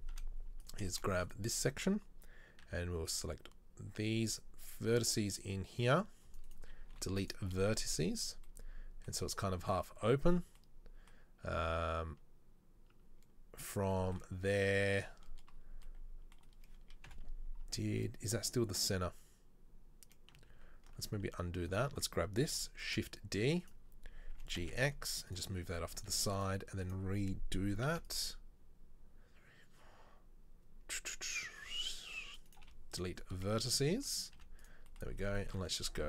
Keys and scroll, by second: 0.0 KP_7, 0.2 z, 2.7 c, 6.9 Delete, 8.0 z, 17.2 KP_7, 20.6 ctrl+z, 23.0 shift+d, 24.4 g, 26.2 z, 27.9 c, 32.7 Delete, 34.4 z.